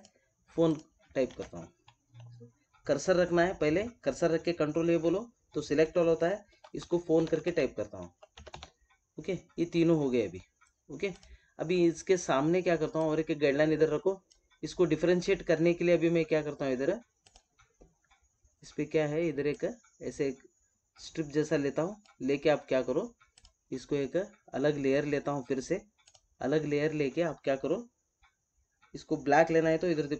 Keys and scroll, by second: 1.2 ctrl+a.